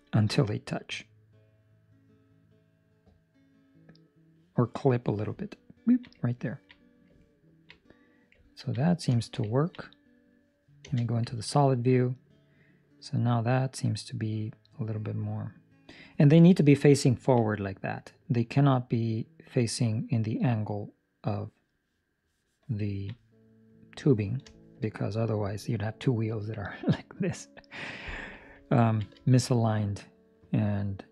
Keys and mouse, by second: 0.3 click, 5.4 ctrl+middle click, 8.6 ctrl+middle click, 9.5 ctrl+middle click, 9.8 middle click, 10.8 z, 11.3 ctrl+middle click, 11.4 middle click, 16.0 ctrl+middle click, 16.5 middle click, 17.0 ctrl+middle click, 17.5 middle click, 19.3 middle click, 22.8 ctrl+middle click, 23.0 middle click, 24.4 shift+middle click, 24.8 middle click, 28.7 ctrl+middle click, 29.2 shift+middle click, 29.4 middle click.